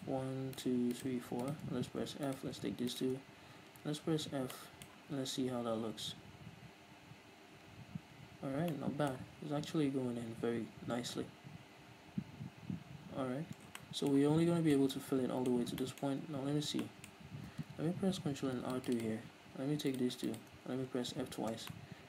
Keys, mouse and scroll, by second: 2.2 f, 2.3-3.7 right drag, 3.7 f, 4.5-19.0 middle drag, 5.1 f, 9.6 f, 13.5 scroll down 2, 13.6 Tab, 15.6 Tab, 16.2-16.8 scroll up 2, 18.0 ctrl+r, 19.0 click, 19.0 right click, 20.3 shift+right click, 21.0 f, 21.3 middle click, 21.3 scroll down 2, 21.5 Tab, 21.7-22.0 middle drag.